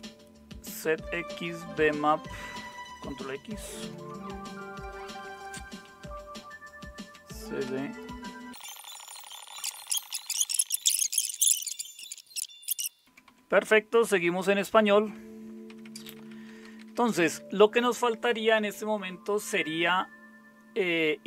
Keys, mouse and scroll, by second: 3.8 ctrl+x, 5.6-7.1 typing, 7.7 Return, 8.3-11.5 typing, 12.2 alt+super+q, 12.7 super+Return, 13.0-17.3 typing.